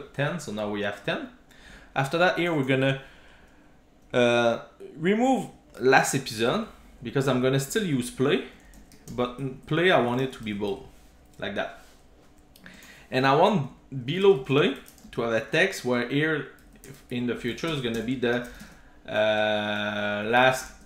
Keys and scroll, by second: 7.7 alt+BackSpace, 10.6 super+s, 15.1 Tab.